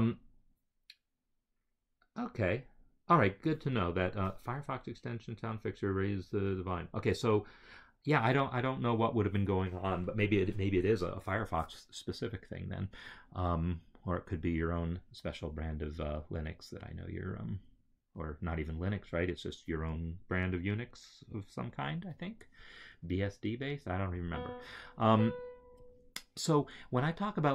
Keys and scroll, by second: 25.0 Right.